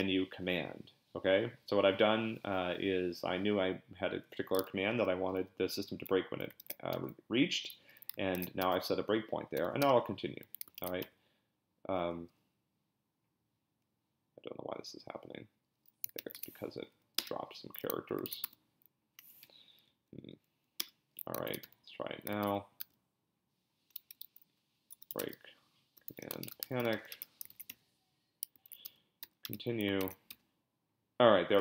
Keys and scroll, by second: 6.6 ctrl+b, 6.9 n, 8.3 ctrl+b, 8.6 p, 9.5 c, 9.8 Return, 10.8 ctrl+b, 11.0 n, 16.2 ctrl+c, 16.7 Up, 17.2 Return, 18.2 ctrl+b, 18.4 p, 19.4 Up, 19.9 Up, 20.3 Up, 20.8 Return, 21.5 ctrl+b, 21.6 n, 22.4 ctrl+b, 22.8 p, 24.2-27.7 typing, 27.5 ctrl+b, 28.7 ctrl+b, 28.8 p, 29.2 c, 29.4 Return, 30.0 ctrl+b, 30.3 n.